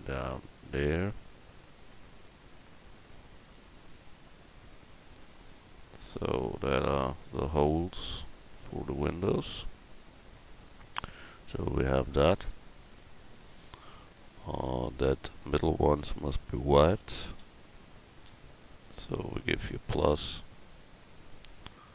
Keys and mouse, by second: 1.9 s, 3.5 click, 4.1-6.4 drag, 8.6 Tab, 15.4 Tab, 16.0 a, 17.4 l, 18.3 l, 19.7-21.5 drag.